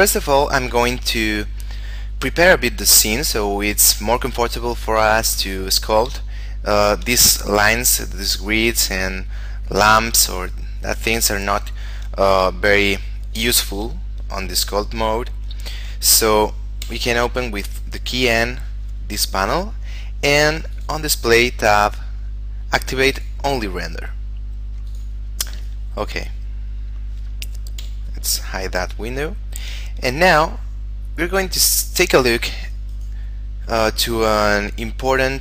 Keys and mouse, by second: 6.5 shift+middle click, 9.9 right click, 10.5 shift+middle click, 12.7 shift+middle click, 17.0 n, 19.5 middle click, 20.9 click, 21.3 middle click, 23.3 click, 25.9 middle click, 28.0 n, 28.9 middle click, 29.5 shift+middle click, 31.6 click, 32.7 middle click, 33.1 right click.